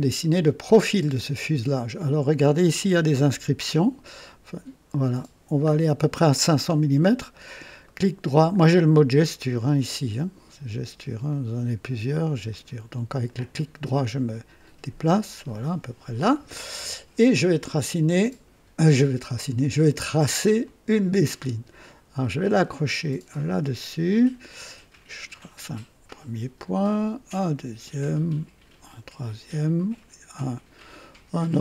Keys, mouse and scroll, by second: 3.9 scroll down 2, 4.5 scroll down 1, 5.3 scroll down 1, 7.8 right click, 11.3 click, 12.5 click, 13.3-16.2 right drag, 20.6 click, 23.4 click, 25.3 click, 27.4 click, 28.8 click.